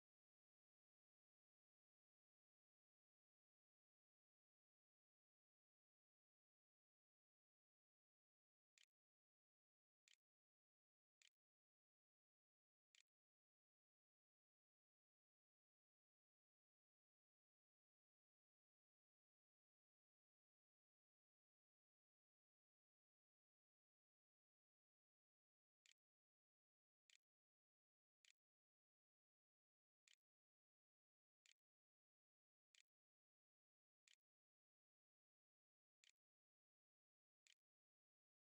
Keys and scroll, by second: 1.0-5.5 typing, 8.6 i, 9.9-12.8 typing, 19.2-20.5 typing, 25.4-33.9 typing, 29.9 Tab, 36.3-38.1 typing, 37.8 shift+Up.